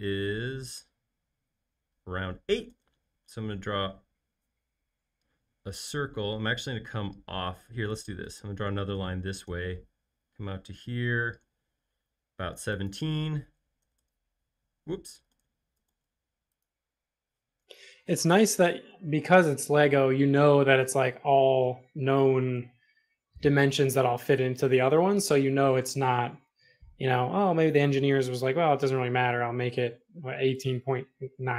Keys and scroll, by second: 2.8 c, 7.6 i, 13.3-14.3 typing, 14.5 Return, 15.3 super+z, 15.9 super+z, 17.6-18.9 typing, 18.0 Return, 20.3 Left, 22.4 8, 22.5 Return, 23.9 4, 24.0 Return, 24.9 e, 27.3 p.